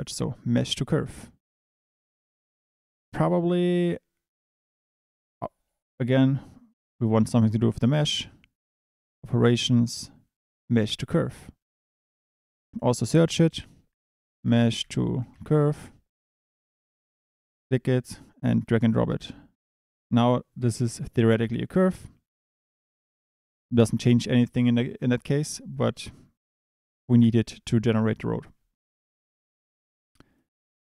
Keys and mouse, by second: 25.7 click, 28.9 click, 30.2 click.